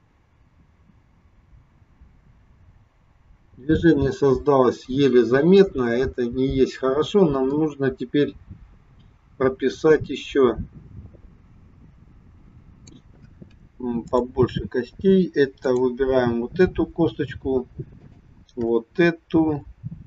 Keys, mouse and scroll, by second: 14.0 click, 14.9-15.6 scroll up 1, 15.6 click, 18.0 shift+click.